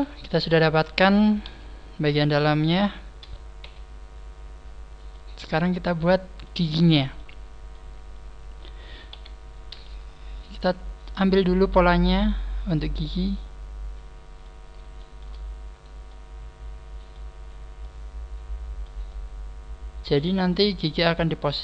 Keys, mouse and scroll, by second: 1.4 KP_1, 2.6 KP_3, 3.6 z, 4.0 scroll up 2, 4.6 scroll down 2, 5.0 middle click, 5.0 KP_3, 6.8 shift+middle click, 7.3-8.4 scroll down 3, 7.6 shift+middle click, 9.0 KP_3, 9.6 scroll up 5, 10.3 z, 11.0 middle click, 12.1 middle click, 12.1 z, 12.1 a, 12.6 middle click, 14.9 shift+middle click, 15.5 scroll down 2, 15.7 shift+middle click, 15.7 right click, 16.2 shift+middle click, 17.3-17.9 scroll up 4, 17.9 shift+middle click, 19.2 shift+middle click, 20.4 scroll down 2, 20.8 shift+middle click.